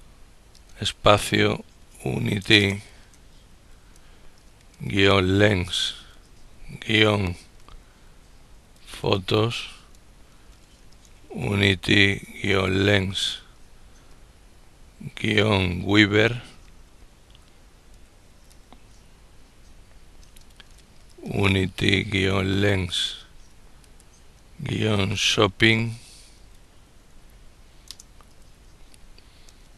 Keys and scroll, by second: 1.1 ctrl+u, 1.6 ctrl+b, 2.7 ctrl+n, 3.1 ctrl+i, 3.1 ctrl+t, 3.5 ctrl+y, 4.8 ctrl+l, 5.0 ctrl+e, 5.1 ctrl+n, 5.5 ctrl+s, 5.9 ctrl+-, 7.4 ctrl+p, 7.8 ctrl+h, 8.1 ctrl+o, 8.5 ctrl+t, 8.8 ctrl+s, 9.5 ctrl+space, 10.2 ctrl+u, 10.6 ctrl+n, 11.1 ctrl+i, 11.1 ctrl+t, 11.4 ctrl+y, 12.3 ctrl+l, 12.5 ctrl+e, 12.7 ctrl+r, 12.9 ctrl+s, 13.7 ctrl+-, 15.8 ctrl+g, 16.5 ctrl+w, 17.0 ctrl+b, 17.6 ctrl+b, 18.2 ctrl+e, 18.3 ctrl+r, 20.5 ctrl+u, 20.7 ctrl+n, 21.2 ctrl+t, 21.4 ctrl+y, 22.2 ctrl+l, 22.4 ctrl+e, 22.5 ctrl+r, 22.9 ctrl+s, 23.6 ctrl+-, 24.7 ctrl+s, 24.9 ctrl+h, 25.2 ctrl+o, 25.7 ctrl+p, 26.0 ctrl+p, 26.9 ctrl+i, 26.9 ctrl+g, 27.9 ctrl+n, 28.1 ctrl+g, 29.2 ctrl+space.